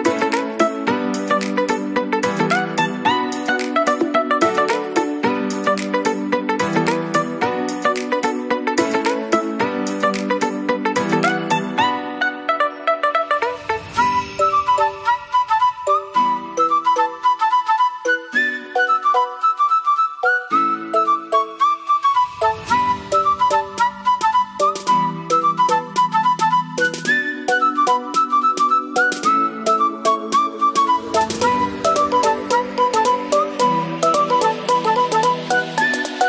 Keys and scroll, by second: 4.9 p, 11.0 ctrl+s.